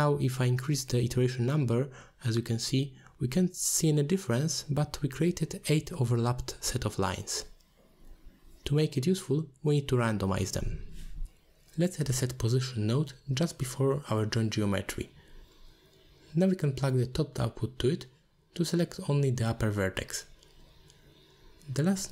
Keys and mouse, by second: 1.8 click, 2.2 click, 2.5 click, 6.3 click, 6.5 click, 10.2 middle click, 11.5 click, 11.7 click, 12.1 shift+a, 15.4 middle click, 16.7-17.8 drag, 18.1 click, 18.9-19.2 middle drag, 19.5-20.2 drag, 20.3 click, 20.7 middle click, 21.5 shift+a.